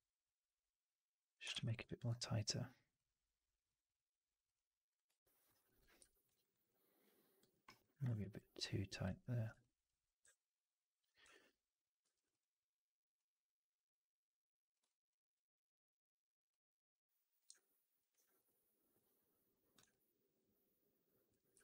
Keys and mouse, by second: 1.4 shift+x, 1.7 click, 4.4 click, 5.0 alt+right click, 5.5 alt+click, 6.2 right drag, 6.4 right drag, 6.5-7.3 drag, 7.4 middle click, 7.5 right click, 8.4 ctrl+z, 9.0 ctrl+z, 9.5 alt+click, 10.1 w, 11.2 1, 11.9 2, 12.0-14.7 drag, 17.4 alt+click, 19.8-21.2 drag, 21.5 4.